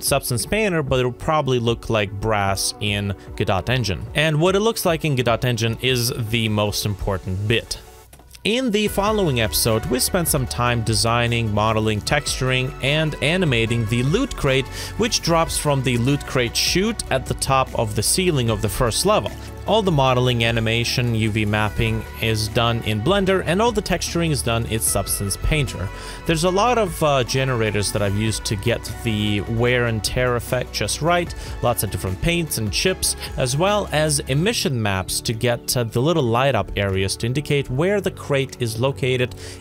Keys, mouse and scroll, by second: 8.0-11.8 typing, 8.7 scroll down 1, 9.4 middle click, 9.7 middle click, 9.9 shift+click, 10.0 middle click, 10.1 scroll down 1, 10.7 middle click, 11.1 shift+click, 11.3 middle click, 11.7 shift+click, 12.0 middle click, 12.5 middle click, 12.6 alt+click, 12.9-14.9 typing, 13.0 middle click, 13.1 scroll down 1, 13.2 middle click, 13.6 Tab, 13.8 middle click, 14.1 middle click, 14.2 ctrl+z, 14.3 scroll down 1, 14.3 middle click, 14.8 scroll down 1, 15.0 middle click, 15.3 right click, 15.4 middle click, 16.1 middle click, 16.2 Tab, 16.4 Escape, 16.4-19.0 typing, 16.8 Escape, 16.9 middle click, 16.9 scroll up 1, 17.3 middle click, 17.6 middle click, 17.8 scroll down 1, 18.1 middle click, 18.2 middle click, 18.3 scroll down 1, 18.4 middle click, 18.5 ctrl+s, 18.7 Return, 19.0 Tab, 19.1 scroll up 1, 19.2 Tab, 19.3 scroll down 2, 19.6 alt+scroll up 1, 19.8-20.7 scroll down 1, 23.5 alt+click, 24.5 alt+click, 25.1 scroll down 2, 26.0 alt+scroll up 1, 26.5 alt+scroll down 1, 27.7 scroll up 1, 27.8 scroll down 1, 28.1 scroll up 1, 31.2 scroll down 1, 33.4 shift+click, 33.6 alt+click, 34.1 alt+scroll up 1, 34.3 alt+scroll down 1, 34.6 ctrl+z, 34.7 alt+middle click, 34.9 alt+click, 35.1 alt+middle click, 35.2 alt+click, 35.5 ctrl+z, 36.5 shift+click, 37.5 alt+middle click, 37.8 ctrl+z, 38.3 shift+z, 38.6 shift+click.